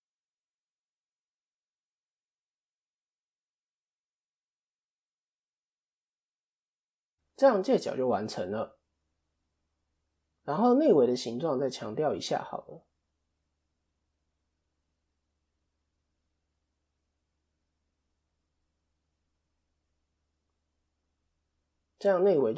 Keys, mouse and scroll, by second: 2.4 Tab, 2.4 click, 4.2 click, 4.7 middle click, 5.7 KP_1, 6.4-7.2 scroll up 1, 7.5 KP_3, 8.6 scroll down 1, 9.0-9.4 scroll up 2, 9.3 middle click, 9.7 scroll down 1, 9.9 middle click, 11.2 click, 12.0 Tab, 12.3 KP_1, 13.1-13.7 scroll down 1, 13.7-14.1 scroll down 2, 14.1 ctrl+r, 20.3 Tab, 20.3-21.0 scroll up 4, 20.7 middle click, 21.0 scroll down 1, 21.3 click, 21.6-22.5 scroll up 2, 22.1 middle click.